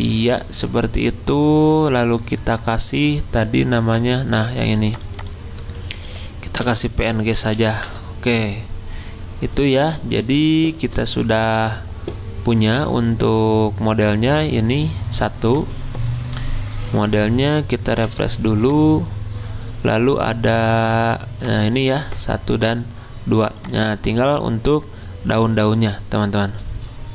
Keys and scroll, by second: 6.4-8.0 typing, 10.0 alt+Tab, 18.0 F5.